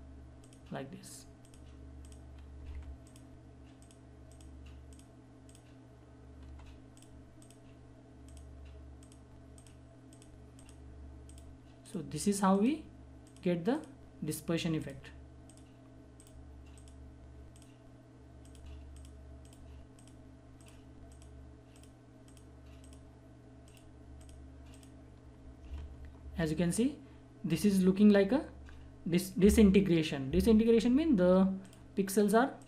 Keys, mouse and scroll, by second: 2.6 [, 3.0 click, 25.7 ctrl+=, 31.6 click.